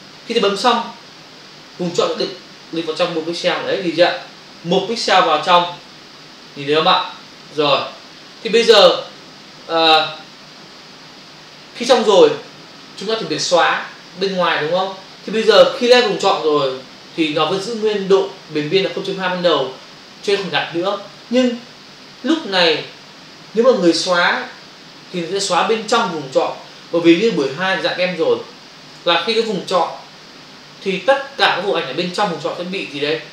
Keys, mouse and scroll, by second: 2.1 click, 4.9 ctrl+click.